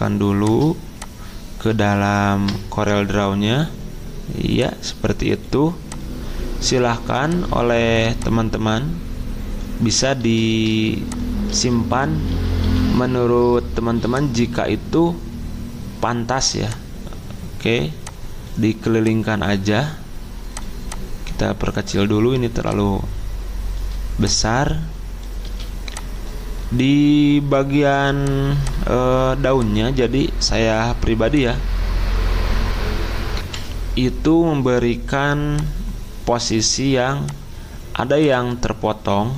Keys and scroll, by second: 1.8 alt+Tab, 11.6 ctrl+z, 12.3 ctrl+z, 12.6 ctrl+z, 18.4 ctrl+z, 25.4 z, 33.4 F10, 33.4 F10.